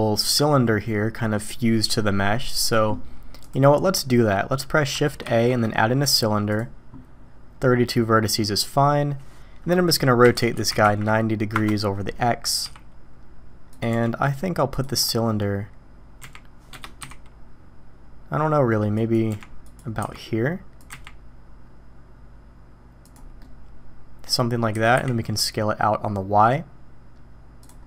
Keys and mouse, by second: 5.2 shift+a, 10.3 r, 12.6 s, 13.9 g, 16.2 g, 17.0 s, 19.3 g, 20.0 s, 20.9 g, 23.4-24.2 middle drag, 24.7 s.